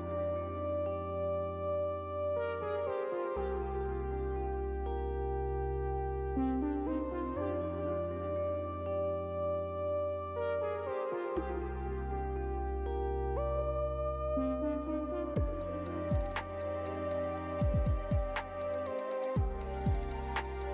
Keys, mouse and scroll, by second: 2.4 click, 4.7 Tab, 5.7-6.7 scroll down 12, 6.7-7.5 scroll down 2, 9.1 u, 14.0 Tab, 15.7 right click, 18.0 right click, 19.3 ctrl+middle click, 19.5 shift+middle click, 20.0 middle click, 20.1 ctrl+middle click, 20.3 middle click, 20.5 ctrl+middle click.